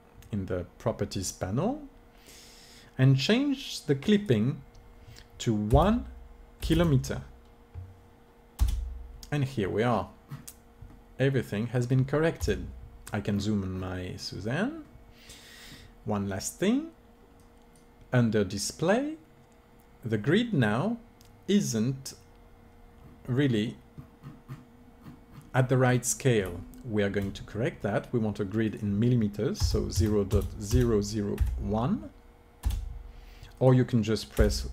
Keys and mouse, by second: 4.1-6.0 drag, 10.9-12.4 middle drag, 12.4 KP_Decimal, 13.8-15.4 middle drag, 17.4-20.4 drag, 24.2-28.6 middle drag, 28.6-30.6 drag, 33.6-34.7 drag.